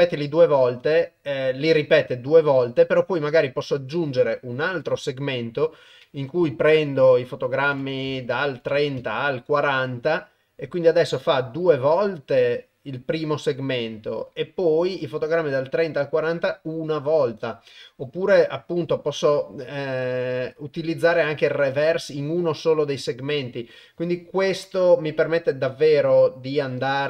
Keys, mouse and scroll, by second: 3.3 click, 7.1 click, 8.4 click, 19.6-21.7 drag.